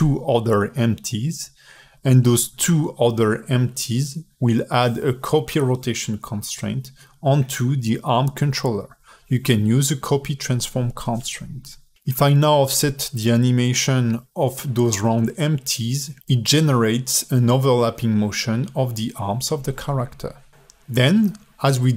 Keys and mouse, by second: 0.1-1.0 drag, 1.2 click, 1.8 click, 2.0 g, 2.5 ctrl+Tab, 2.6 click, 3.1 ctrl+Tab, 3.1 click, 3.8 click, 5.1 click, 5.9 click, 6.6 click, 6.8 ctrl+Tab, 7.0 g, 7.6 click, 7.8 ctrl+Tab, 8.1 click, 8.4-8.9 drag, 9.2 click, 9.9 ctrl+Tab, 10.1-12.9 typing, 11.4 shift+click, 13.2 alt+middle drag, 14.0-14.5 alt+middle drag, 15.1 alt+middle drag, 16.8 alt+middle drag, 19.6 click, 21.0 click.